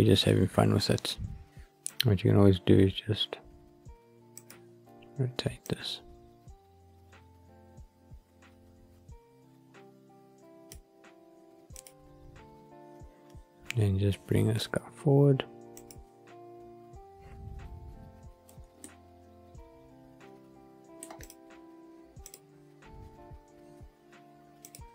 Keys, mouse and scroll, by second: 1.8 click, 4.3 click, 5.6 click, 5.7 click, 11.7 click, 14.6 scroll down 2, 15.7 click, 18.4 g, 18.8 middle click, 21.2 click, 22.2 click, 24.7 click.